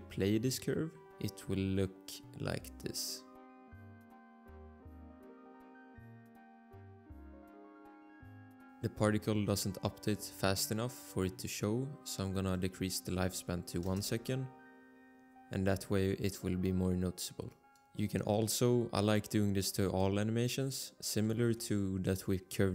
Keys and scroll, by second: 13.8 Return, 17.8 Return.